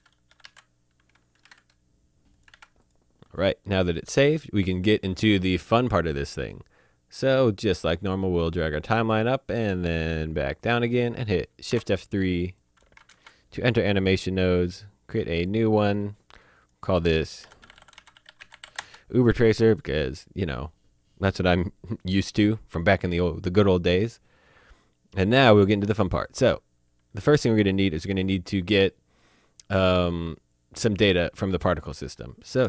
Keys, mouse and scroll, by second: 0.0-1.4 typing, 2.3 click, 2.5 ctrl+s, 2.8 click, 7.6 click, 11.7 3, 12.3 click, 13.1 F3, 15.3 click, 17.4-18.7 typing, 18.8 Return, 23.8 click, 26.2 click.